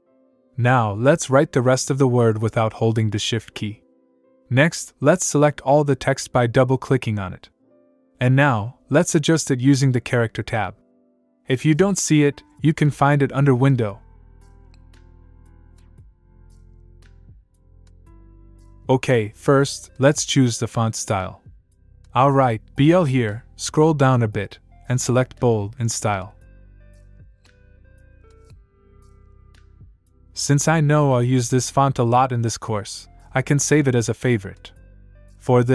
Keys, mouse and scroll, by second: 0.8-2.1 typing, 4.1 click, 13.2 click, 18.6 click, 21.6 click, 22.2-23.6 typing, 28.1 scroll down 1, 29.5 click, 32.7 click, 34.2 scroll up 1.